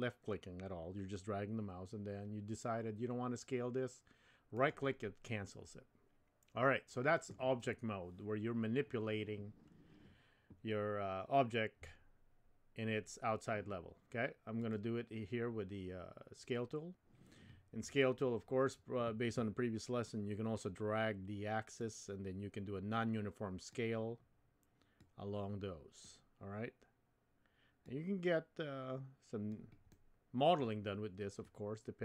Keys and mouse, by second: 14.7 click, 21.8-23.7 drag, 25.0-26.0 drag, 27.9-29.5 drag, 29.9 middle click, 31.6-32.0 drag.